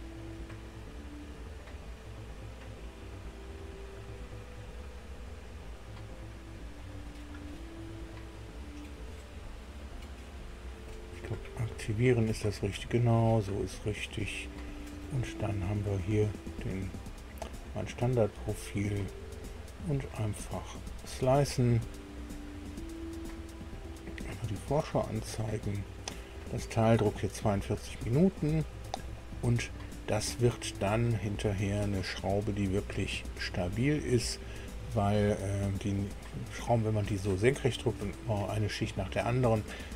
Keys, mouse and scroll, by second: 0.8 click, 5.8 click, 6.8 click, 9.1 right click, 10.9 click, 13.0 click, 14.4 click, 16.3 scroll up 2, 18.0 click, 20.7 click, 24.5 click, 27.7-28.1 scroll up 1, 28.3 middle click, 29.2-30.5 right drag, 30.8-31.8 scroll up 2, 32.2-35.7 right drag.